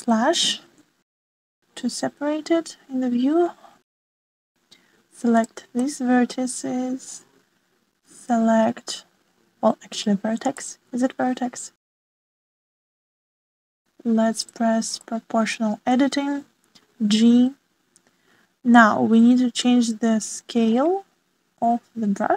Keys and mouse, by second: 0.9 /, 2.4-4.5 middle drag, 6.7 middle click, 11.5-12.8 middle drag, 13.5 shift+middle click, 15.3 middle click, 16.0 middle click, 17.8 g.